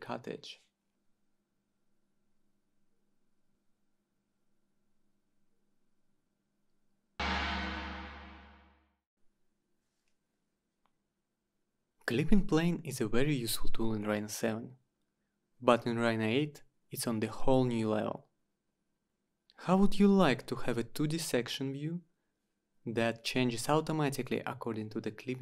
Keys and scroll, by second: 4.0 Delete, 11.7-13.9 typing, 15.2 Down, 15.8 Down, 17.3 Return.